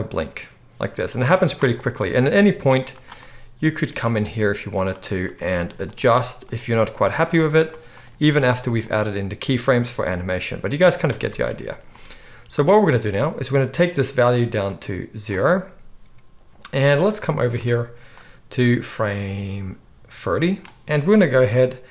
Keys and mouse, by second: 2.0 Tab, 3.0-5.3 middle drag, 4.2 g, 5.3 click, 5.9-7.5 middle drag, 6.0 g, 7.5 click, 7.6-14.6 middle drag, 8.0 g, 9.9 g, 11.3 Tab, 14.6-21.9 drag.